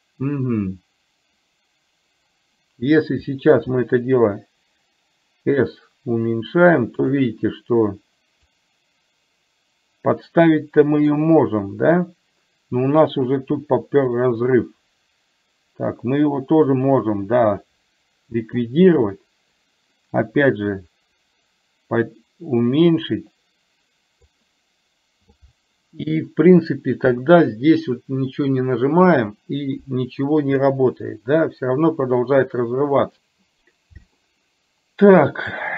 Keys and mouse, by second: 3.7 s, 8.6 click, 9.0-11.4 drag, 14.5-18.7 drag, 20.9-24.4 drag, 34.4-35.7 middle drag.